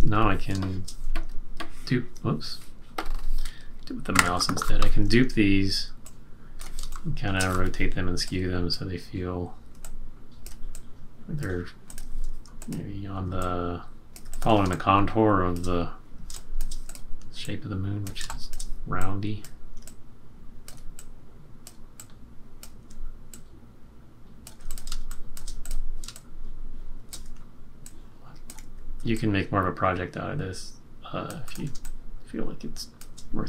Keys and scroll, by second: 0.7 space, 6.9 space, 7.7 q, 14.6 space, 16.3 space, 16.3 space, 18.2 space, 24.9 space, 26.2 space, 31.8 space.